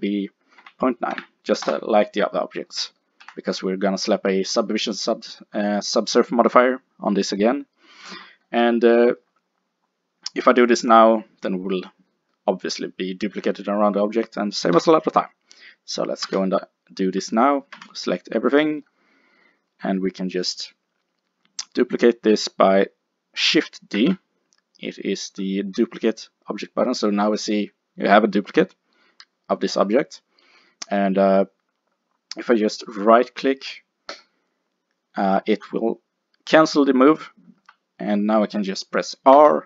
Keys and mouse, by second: 1.0 click, 2.7 middle click, 3.3 n, 14.8 KP_7, 16.3 a, 17.8 a, 22.1-24.0 middle drag, 24.0 shift+d, 34.2-36.1 drag, 39.4 r.